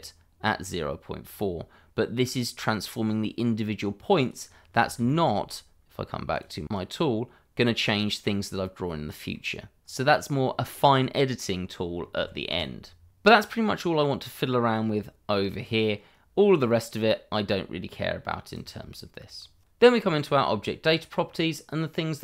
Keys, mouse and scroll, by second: 4.2 click, 5.1 shift+middle click, 6.3 click, 8.4 middle click, 12.2 ctrl+z, 15.1 click, 15.7 shift+middle click, 19.9-22.0 scroll up 1, 22.0-22.2 scroll down 1.